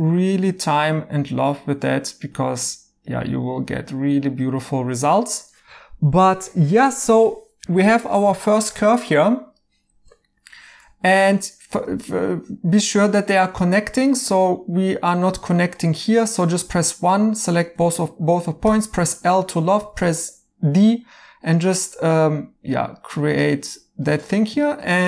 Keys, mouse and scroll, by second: 8.5 right click, 10.2 right click, 11.8 right click, 14.4 right click, 18.6 l, 23.1-23.8 typing, 24.1 right click.